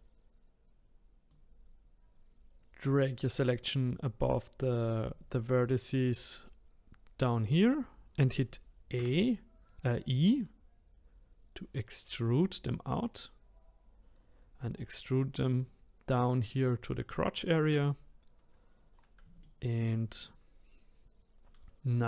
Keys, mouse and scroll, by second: 19.4-22.0 middle drag.